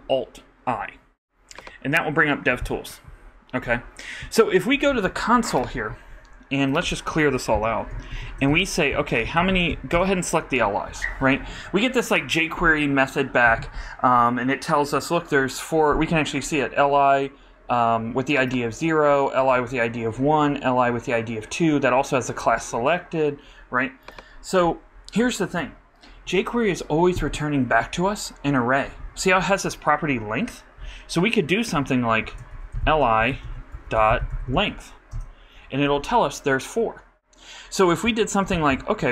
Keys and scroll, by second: 7.5 super+k, 8.1 shift+super+4, 8.2-10.2 typing, 31.8-34.2 typing, 38.4 alt+Up, 38.5 alt+Left.